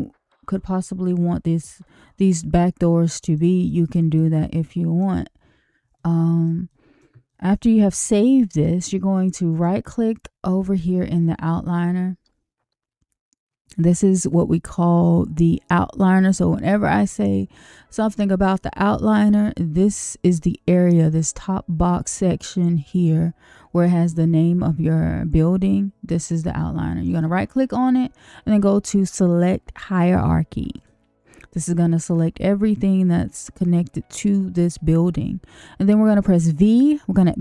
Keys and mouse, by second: 2.5 middle click, 3.6 middle click, 4.1 middle click, 5.9 shift+middle click, 6.6 middle click, 7.2 shift+middle click, 9.5 click, 27.0-30.8 drag.